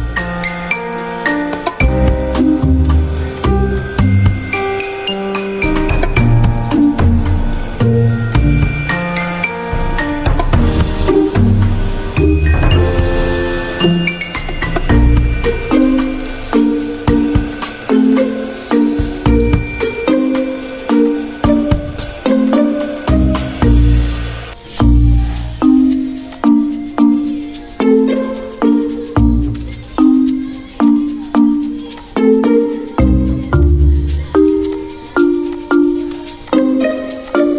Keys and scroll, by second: 0.7 v, 3.6 ctrl+z, 4.5 z, 6.4 ctrl+z, 7.2 ctrl+z, 7.7 v, 10.9 Delete, 12.2 y, 21.1-21.8 typing, 24.7 Escape, 25.7 /, 25.9 F9, 33.4 x.